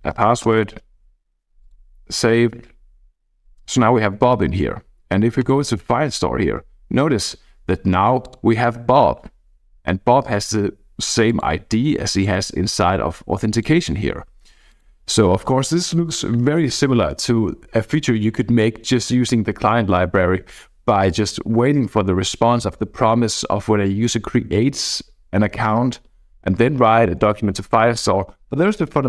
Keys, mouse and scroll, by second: 0.0-1.0 typing, 0.6-1.5 scroll down 1, 1.6 click, 5.4 click, 6.8-7.3 scroll down 1, 7.3-8.0 scroll up 1, 8.2-10.3 drag, 10.3-11.2 scroll up 1, 11.2 click, 12.1 click, 13.5 click, 14.7 click, 15.4 click.